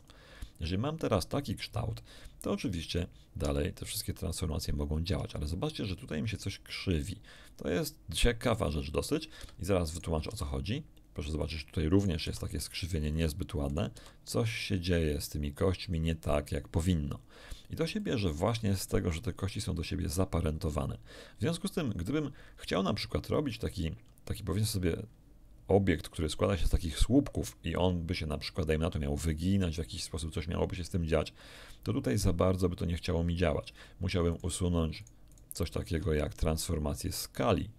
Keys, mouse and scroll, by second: 2.9 right click, 3.4 r, 3.8 click, 5.1 r, 9.3 Escape, 9.9 right click, 10.2 r, 11.3 click, 11.9 right click, 12.2 r, 13.0 click, 13.7 right click, 13.9 r, 15.8 click, 17.4 scroll down 2, 17.9 shift+middle click, 34.3 right click, 34.9-35.5 shift+right drag.